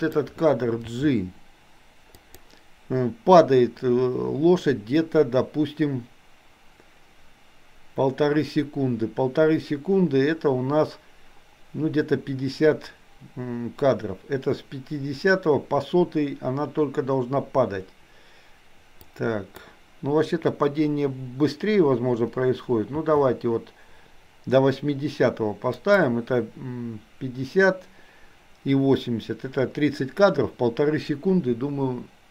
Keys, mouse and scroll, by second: 0.9 g, 19.0 click, 22.9 g.